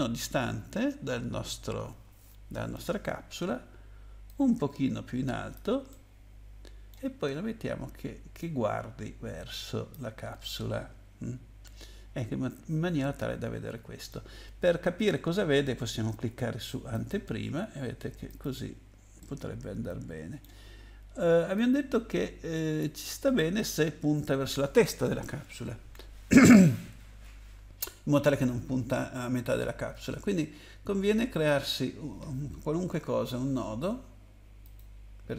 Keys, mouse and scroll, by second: 5.5 click, 5.9 middle click, 8.4 click, 10.4 middle click, 16.9 click, 18.3 click, 19.2 middle click, 21.5 click, 31.3 click, 34.6 click.